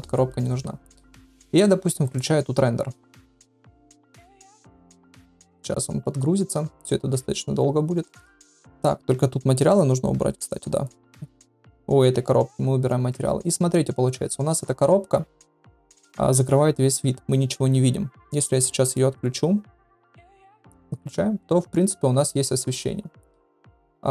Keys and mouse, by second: 2.3-4.4 drag, 9.6 click, 11.0 click, 11.2 click, 18.2 click, 18.8 click, 20.4 click.